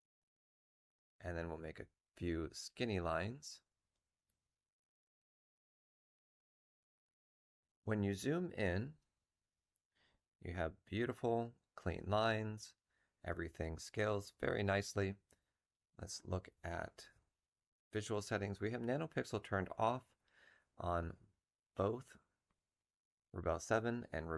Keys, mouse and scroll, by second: 3.8-7.3 ctrl+drag, 5.4 ctrl+middle click, 16.4 F12.